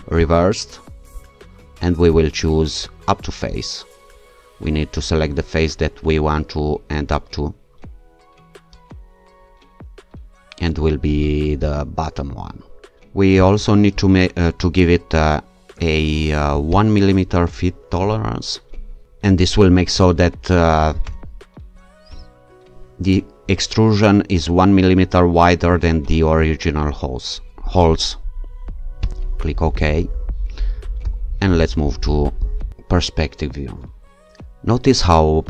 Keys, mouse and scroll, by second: 0.2 click, 2.2 click, 3.5 click, 11.6 alt+click, 13.4 click, 16.5 click, 17.9 1, 19.6 2, 21.0 BackSpace, 21.7 2, 29.1 click, 31.0 0, 32.4 click.